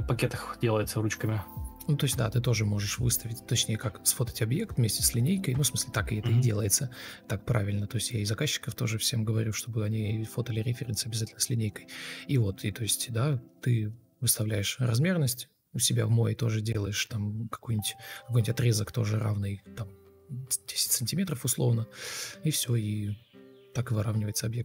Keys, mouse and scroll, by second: 0.0 alt+click, 3.7 ctrl+m, 9.9 Escape, 11.6 shift+g, 14.2 ctrl+space, 16.6 Escape, 17.6 ctrl+z, 17.8 ctrl+m, 19.8 Delete, 22.2-23.1 typing.